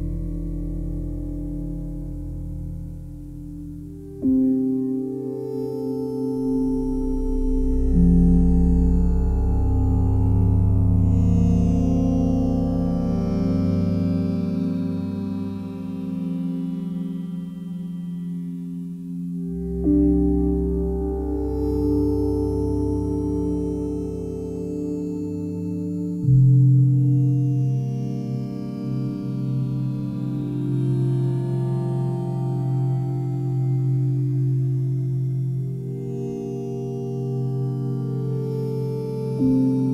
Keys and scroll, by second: 11.4 s.